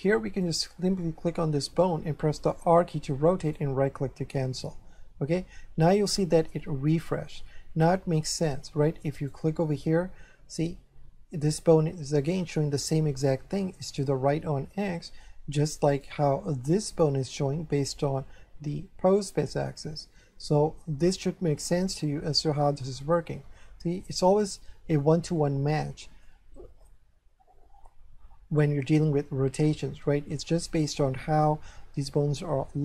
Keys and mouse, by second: 0.4 right click, 2.3 r, 3.5 right click, 8.3 shift+middle click, 9.2 right click, 13.3 shift+middle click, 14.8 shift+middle click, 15.9 shift+right click, 22.8 middle click, 25.4 middle click.